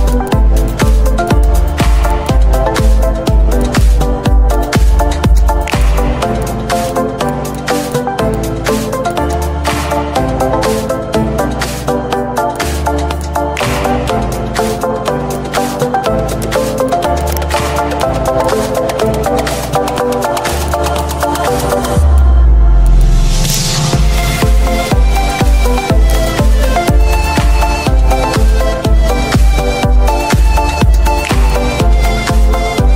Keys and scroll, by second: 27.7 space, 31.9 space.